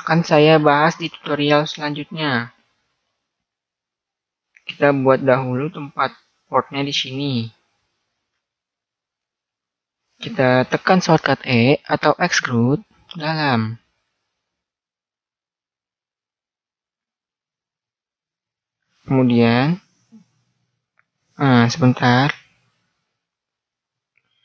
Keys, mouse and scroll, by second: 0.3-2.6 middle drag, 4.7-8.9 right drag, 8.9-10.6 middle drag, 12.1 e.